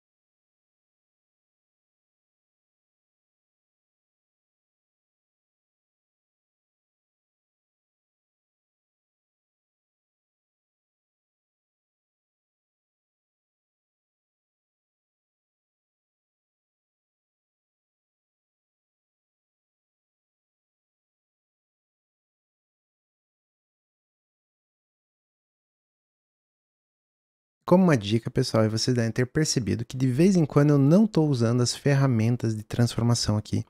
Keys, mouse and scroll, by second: 1.2 click, 1.3 g, 1.6 s, 2.3 click, 2.6 click, 2.8 click, 3.0 g, 3.5 s, 4.5 click, 5.0 click, 5.1 s, 6.2 g, 7.3 s, 10.0 click, 10.1 s, 10.6 click, 10.8 s, 11.4 s, 11.9 click, 12.2 s, 13.1 click, 13.3 click, 13.5 click, 13.7 click, 14.1 s, 14.7 click, 17.8 alt+d, 19.0 click, 20.2 click, 21.0 click, 21.4 click, 22.2 g, 22.7-23.7 drag, 24.2 click, 25.3-25.6 drag, 27.1 click.